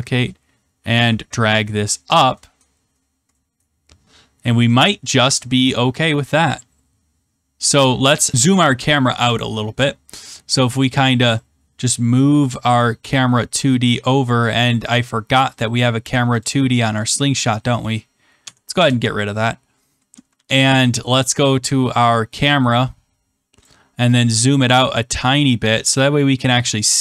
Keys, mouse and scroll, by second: 2.0 click, 2.5 click, 2.6-3.1 scroll, 3.5 scroll, 8.2 middle click, 10.1 middle click, 11.7 scroll, 13.2 click, 15.5 click, 16.4 click, 18.4 click, 18.4 Delete, 18.7 Return, 20.2 ctrl+s, 21.3 click, 23.5 click, 26.4 click.